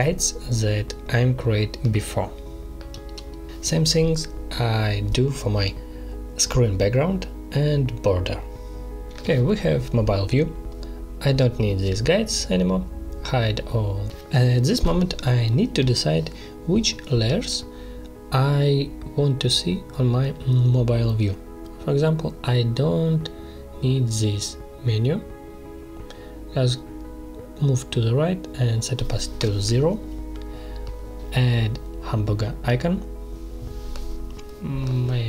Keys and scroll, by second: 10.0 space, 19.3 space.